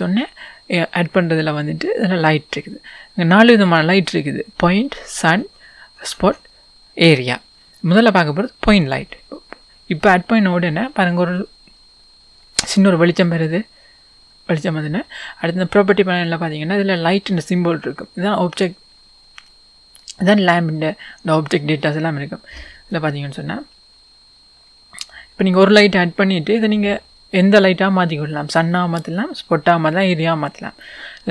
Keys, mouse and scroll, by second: 9.7-10.5 scroll down 2, 10.5-12.2 scroll up 2, 12.2-13.2 scroll down 2, 13.2-14.1 scroll down 1, 14.1 scroll up 2, 14.3 click.